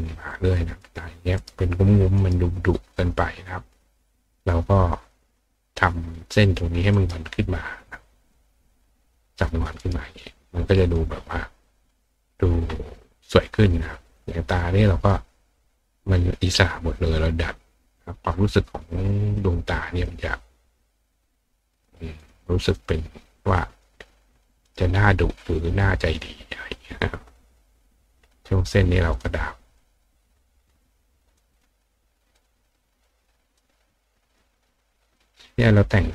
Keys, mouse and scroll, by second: 0.3 click, 1.4 right click, 2.2 right click, 4.7 click, 6.9 right click, 8.0 click, 9.8 right click, 10.7 click, 12.0 click, 14.1 click, 14.8 click, 17.1 click, 19.3 click, 20.9 click, 21.7 click, 22.2 click, 22.7 click, 23.4 click, 24.3 click, 24.6 right click, 26.5 click, 29.1 click, 29.8 click, 30.8 click, 31.5 click, 32.3 click, 33.6-34.4 drag, 35.1 click.